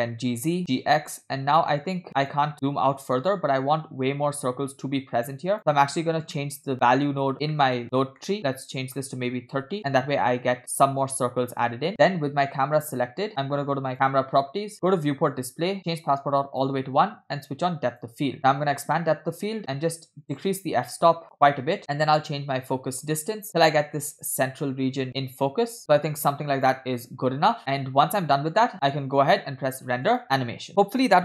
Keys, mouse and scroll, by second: 0.1 g, 0.7 g, 5.5 click, 6.1 scroll down 2, 6.4 middle click, 7.3-8.2 scroll up 5, 7.6 middle click, 8.3 middle click, 8.7-9.8 drag, 13.4 click, 13.9 click, 14.9 click, 15.3 scroll down 2, 15.9 click, 18.1 click, 20.2-21.8 drag, 22.1-26.8 drag, 30.1 click.